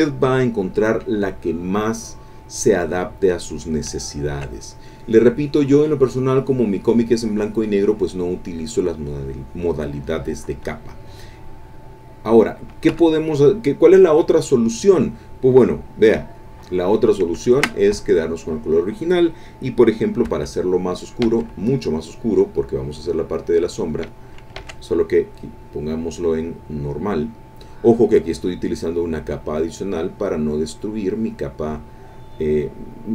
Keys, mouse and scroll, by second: 3.2 click, 4.0-9.8 shift+drag, 12.0 click, 12.9 Escape, 16.3 click, 17.4 ctrl+click, 20.3 k, 21.2 k, 22.6-24.1 drag, 24.6 ctrl+z, 25.5 click, 26.1 click, 27.5 click, 29.5-32.5 drag.